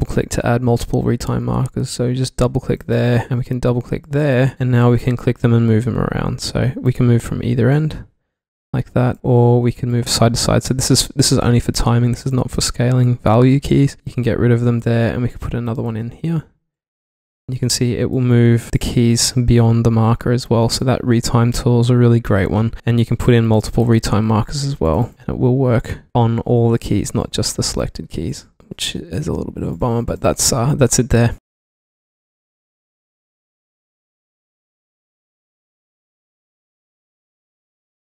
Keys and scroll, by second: 12.5 super+z, 18.3 super+z, 21.0 super+z, 26.1 super+z, 28.7 super+z, 29.1 q.